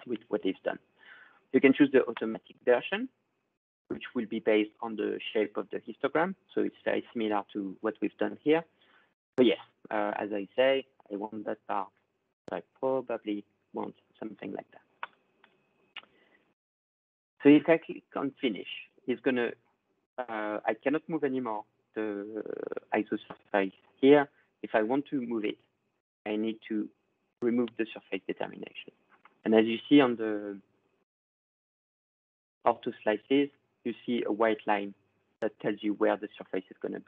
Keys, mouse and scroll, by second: 13.7 click, 15.3 click, 21.2 scroll, 23.9 click, 32.0 middle click, 33.2 middle click.